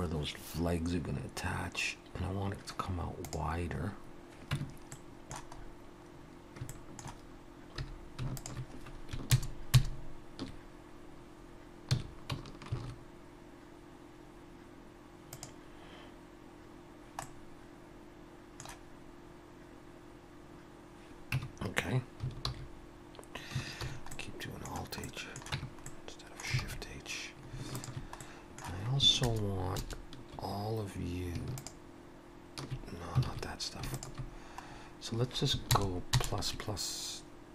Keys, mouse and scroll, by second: 4.5 Tab, 4.9 middle click, 5.6-6.0 scroll up 1, 6.6 scroll up 4, 6.7 shift+middle click, 7.7 3, 8.4 alt+shift+click, 9.3 ctrl+KP_Add, 9.8 ctrl+KP_Add, 11.9 s, 17.2 middle click, 21.4 Tab, 22.5 alt+h, 23.8 shift+h, 24.1 middle click, 25.0 middle click, 25.5 Tab, 25.9 middle click, 26.6 alt+a, 27.8 alt+shift+click, 28.2 middle click, 29.2 ctrl+KP_Add, 29.8 ctrl+KP_Add, 31.6 alt+shift+click, 33.3 alt+a, 33.9 alt+shift+click, 34.7-35.6 scroll up 1, 35.6 ctrl+KP_Add, 36.2 ctrl+KP_Add.